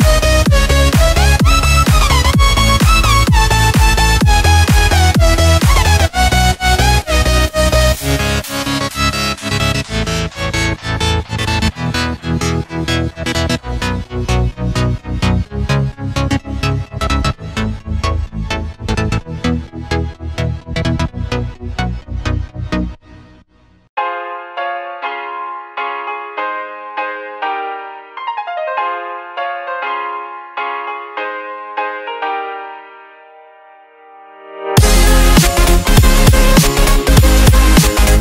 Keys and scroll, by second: 1.6 i, 2.7 v, 3.8 shift+m, 7.1 v, 9.2 Tab, 12.6 Tab, 13.1 super+z, 15.2 Delete, 19.0 super+z, 20.8 super+z, 21.7 super+x, 23.2 Delete, 24.1 super+f, 24.8 Tab, 24.9 super+f.